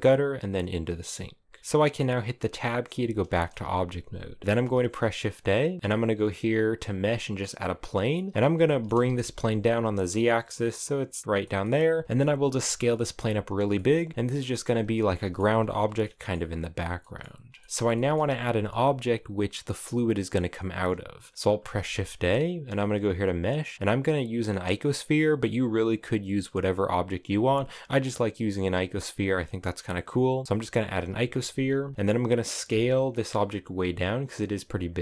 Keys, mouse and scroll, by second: 1.0 g, 1.6-2.6 middle drag, 2.6 Tab, 3.0-4.4 shift+middle drag, 4.4 shift+a, 7.3-7.8 scroll down 6, 7.8 middle click, 8.0 scroll up 6, 8.3 shift+middle click, 8.6 g, 11.2 middle click, 11.3-11.8 scroll down 7, 11.8 s, 12.2 s, 12.8 s, 13.4 middle click, 13.7 s, 14.2 middle click, 15.1 s, 15.6 middle click, 16.1-16.6 scroll up 11, 16.6 middle click, 16.9-17.4 scroll down 3, 17.4-21.3 shift+middle drag, 21.3 shift+a, 32.3 s.